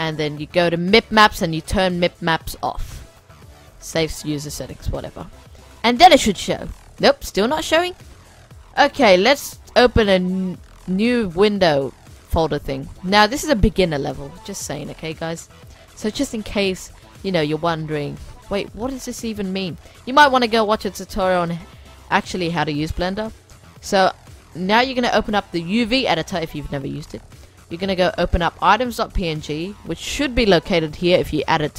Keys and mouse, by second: 5.8-7.8 middle drag, 8.0-9.9 drag, 10.2-12.0 drag, 12.6-14.4 drag, 15.3-17.8 drag, 18.2-19.8 middle drag, 23.8-25.6 drag, 25.7-30.7 drag.